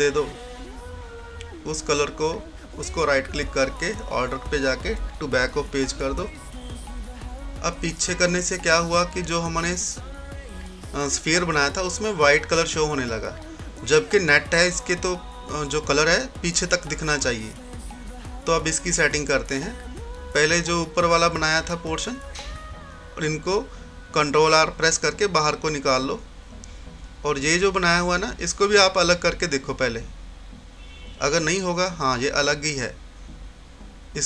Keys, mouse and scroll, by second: 2.5 right click, 3.6 click, 6.5-7.5 scroll down 1, 7.5-8.5 scroll up 1, 9.7 typing, 11.0 scroll down 1, 16.6-17.4 scroll down 1, 17.4-18.0 scroll up 1, 18.0-18.6 scroll down 1, 19.5-22.6 drag, 24.6 ctrl+r, 26.4 typing, 27.2-32.4 drag, 28.2 typing, 32.2 typing.